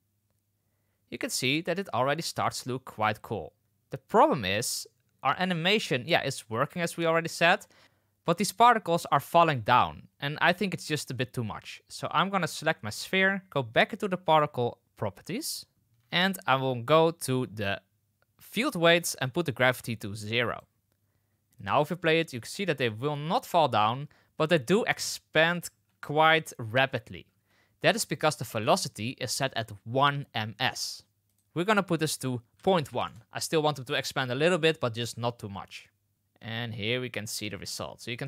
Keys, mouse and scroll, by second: 4.0 space, 5.1 space, 7.1 space, 7.8 space, 8.8 space, 9.5 space, 18.4 click, 19.9 click, 21.5 click, 21.9 space, 25.6 space, 26.6 space, 27.2 space, 28.6 click, 31.3-35.0 drag, 36.1 space, 37.9 space.